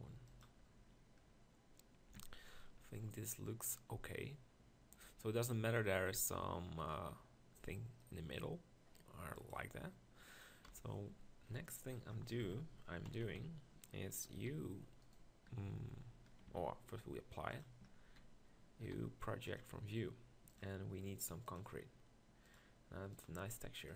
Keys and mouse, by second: 2.2 Tab, 6.6 middle click, 10.7 KP_1, 11.4 Tab, 12.4 ctrl+l, 13.1-13.4 KP_4, 14.4 u, 15.5 u, 16.5 Tab, 17.8 Tab, 18.9 u.